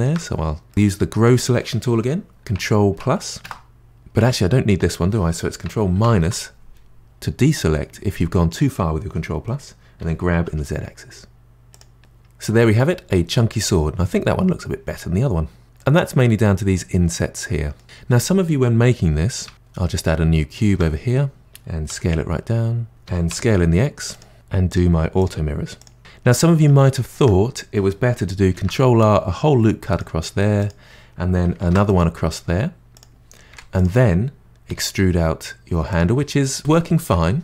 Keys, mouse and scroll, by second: 0.3-0.7 scroll up 2, 0.7-2.9 middle drag, 2.9 KP_Add, 3.4 KP_Add, 3.9-5.7 middle drag, 5.9 KP_Subtract, 7.5-10.0 middle drag, 10.0 g, 12.0-15.0 middle drag, 15.6 scroll up 3, 15.8-17.8 middle drag, 19.5 Tab, 20.6 shift+a, 21.4 g, 21.9 s, 22.9 scroll up 2, 23.1 s, 24.3 Tab, 24.7 click, 25.2 click, 25.8 click, 26.0-28.5 middle drag, 28.5 ctrl+r, 31.6 ctrl+r, 33.5 3, 33.7 click, 34.7 e, 36.4-37.4 middle drag.